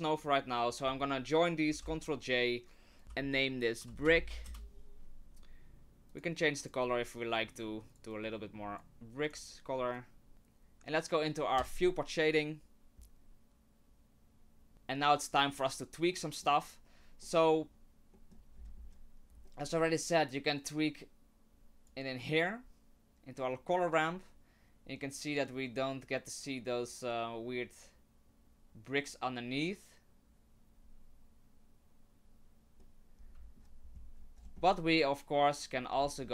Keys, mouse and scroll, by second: 0.2 click, 1.7 ctrl+j, 3.0 click, 6.1 click, 6.6 click, 9.3 click, 10.0 click, 11.6 click, 14.7 middle click, 16.1 middle click, 17.2 middle click, 18.2 middle click, 18.6-19.5 scroll up 10, 19.5 middle click, 19.6 middle click, 20.6 click, 32.8 middle click, 34.2-34.6 scroll down 9, 34.6 middle click, 35.9-36.3 scroll up 11.